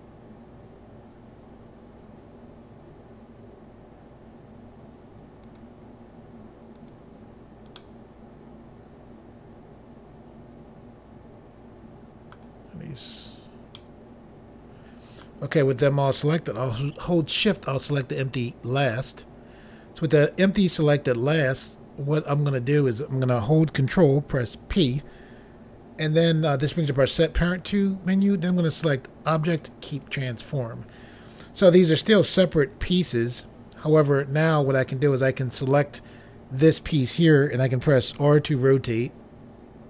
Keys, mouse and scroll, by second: 5.5 shift+click, 6.8 shift+click, 7.8 middle click, 13.8 middle click, 18.6 shift+click, 24.8 ctrl+p, 29.9 click, 34.2 click, 35.3 click, 37.9-38.2 typing.